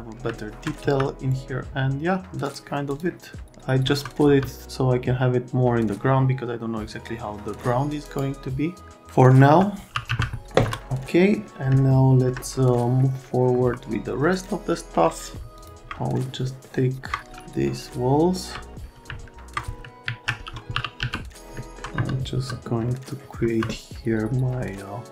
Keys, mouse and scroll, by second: 0.4 alt+middle click, 0.8 z, 2.5 click, 2.9 click, 3.8 F3, 4.2 F3, 8.0 right click, 9.4 F3, 9.7 F3, 10.1 z, 10.6 F3, 10.9 right click, 11.8 alt+right click, 13.5 F3, 14.3 click, 15.6 click, 16.5 middle click, 17.4 alt+middle click, 19.3 alt+1, 20.0 alt+q, 20.5-21.5 typing, 21.9 F3, 22.4 F3, 22.9 right click, 23.4 F3.